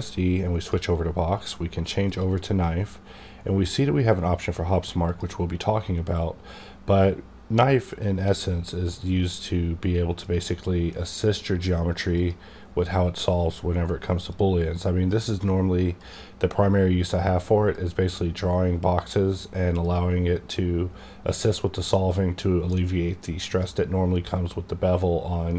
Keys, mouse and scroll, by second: 0.5 click, 2.0 click, 5.0 click, 10.2-14.3 drag, 14.3-25.5 drag.